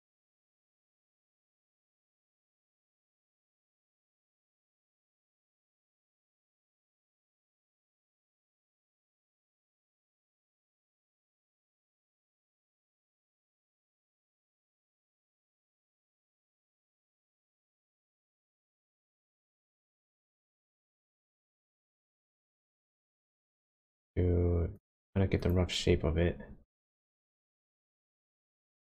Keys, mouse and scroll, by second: 0.3 click, 1.1 click, 1.3 g, 2.8 scroll up 1, 3.0-4.1 scroll down 9, 5.8 click, 6.4 click, 6.7 g, 8.3-9.3 scroll up 6, 9.3-10.7 scroll down 2, 11.3 click, 11.9 click, 12.0 g, 13.0-13.4 scroll down 1, 13.7-14.9 scroll up 8, 15.3-16.0 scroll down 3, 16.2-17.0 scroll down 1, 17.0 click, 17.3 click, 17.8 g, 19.8 click, 20.6 click, 21.2 click, 21.6 g, 22.7 scroll down 1, 24.8 click, 25.2 scroll down 1, 25.4 click, 26.0 scroll up 2, 26.7 click, 27.0 g.